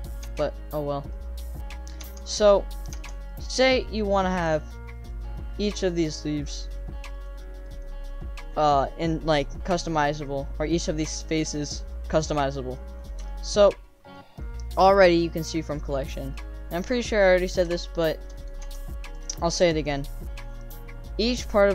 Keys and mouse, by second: 0.2 Tab, 1.1-1.4 drag, 2.0 Tab, 2.1 click, 2.9 Tab, 3.3 click, 3.7 click, 4.2 drag, 5.1 click, 5.5 click, 6.5 click, 6.7 click, 7.2 click, 7.7 middle click, 10.0 middle drag, 11.9-12.7 middle drag, 13.2 shift+middle drag, 13.7 click, 16.3 middle drag, 17.7 shift+middle drag, 18.6 Tab, 19.2 click, 19.6 3.